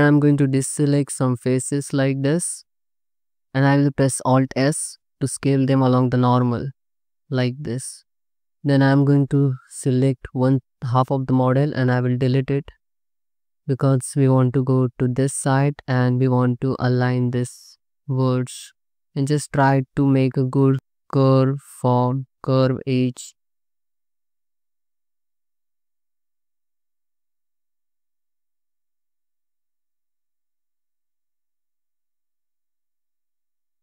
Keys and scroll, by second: 0.3 alt+z, 7.2 3, 9.7 alt+z, 10.3 3, 12.6 x, 13.6 alt+z, 17.0 1, 20.0 ctrl+z, 20.2 3, 20.5 2, 23.0 1, 23.3 alt+z, 23.7 c, 24.2 g, 25.6 g, 25.8 z, 26.7 2, 28.1 Tab, 28.5 alt+shift+z, 30.0 alt+shift+z, 30.0 Tab, 30.8 2, 31.5 2, 32.5 alt+z, 32.6 1.